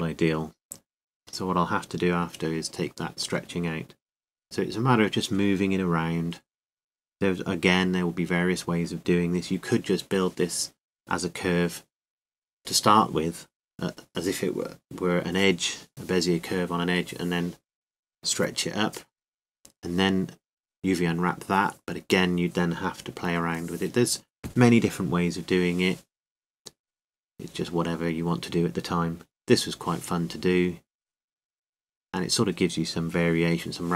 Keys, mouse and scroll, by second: 1.3 r, 3.6-6.4 drag, 8.7 ctrl+z, 9.1 ctrl+z, 9.5 ctrl+z, 10.1 ctrl+z, 11.4-13.3 middle drag, 12.7 r, 19.1-20.5 drag, 22.5 ctrl+z, 22.5-23.7 drag, 22.5 o, 26.0 o, 27.1-28.8 drag.